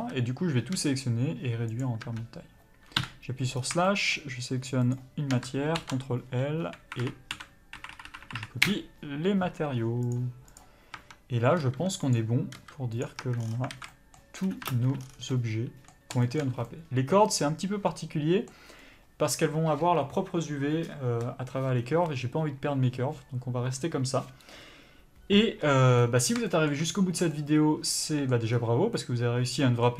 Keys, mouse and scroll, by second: 0.7 s, 2.0 Tab, 3.0 KP_Divide, 3.6 scroll up 1, 3.8 shift+middle click, 4.9 shift+click, 8.6 Up, 10.1 click, 10.9 Tab, 11.6 s, 13.2 Tab, 13.4 scroll down 1, 13.7 alt+a, 13.9 middle click, 14.7 ctrl+space, 14.7-29.9 middle drag, 15.0 scroll down 1, 26.9 scroll down 1, 28.5-28.9 scroll up 2.